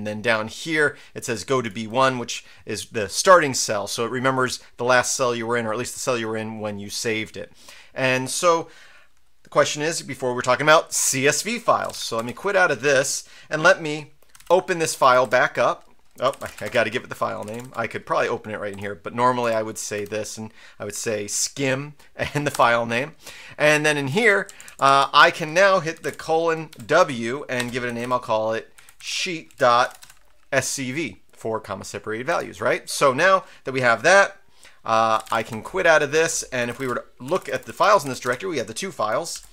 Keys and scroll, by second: 11.6-12.6 typing, 14.1-14.9 typing, 15.0 Right, 15.2 Return, 16.1-17.6 typing, 18.7 Return, 19.4 Up, 19.9 Tab, 22.5 Return, 24.1 Up, 24.4 Down, 24.6 Down, 24.9 Down, 26.0-30.5 typing, 32.3 Return, 34.9-39.5 typing, 39.3 ctrl+l.